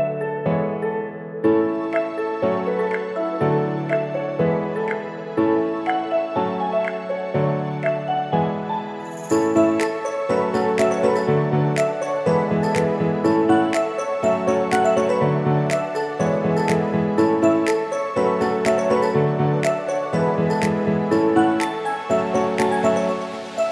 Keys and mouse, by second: 0.2 ctrl+alt+KP_0, 2.7 click, 4.9-7.6 drag, 9.3 q, 11.2 n, 12.8 click, 14.7 click, 15.8 q, 17.8-18.4 shift+middle drag, 18.8 ctrl+drag, 19.3 click, 19.8-20.3 shift+drag, 20.8 shift+click, 21.5 shift+click, 22.2 n, 23.0 shift+click, 23.4 click.